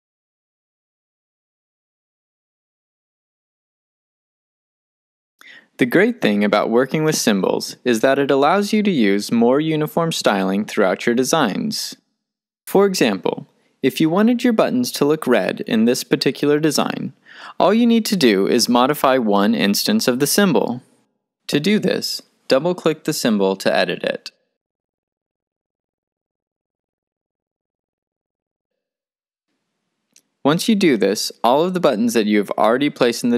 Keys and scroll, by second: 0.0-0.5 typing.